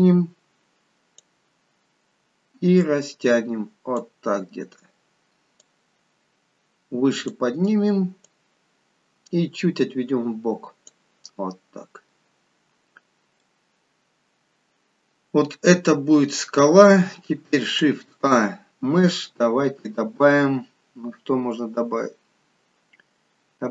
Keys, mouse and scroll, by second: 4.3-4.9 scroll down 2, 5.6 click, 5.6 scroll down 3, 11.2-12.8 scroll up 1, 13.0 scroll down 1, 13.3 middle click, 15.9-16.3 scroll down 2, 16.3 middle click, 17.7 shift+a.